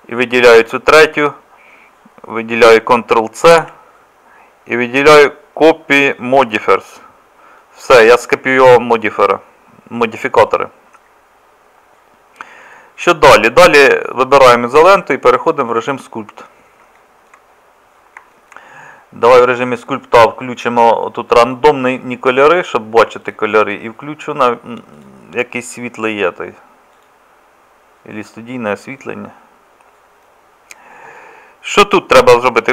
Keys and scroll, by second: 3.5 ctrl+c.